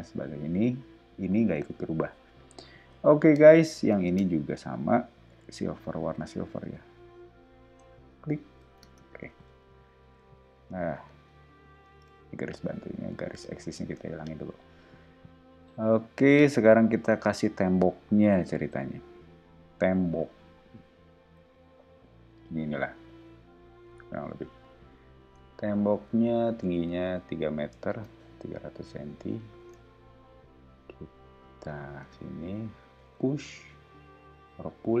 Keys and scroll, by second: 2.9 o, 4.0 space, 6.6 b, 8.8 space, 9.1 ↺, 10.2 o, 12.0 \, 16.9 e, 17.7 r, 24.5 space, 25.3 p, 26.8-27.7 typing, 27.9 Return, 28.7 o, 32.0 space, 33.1 p.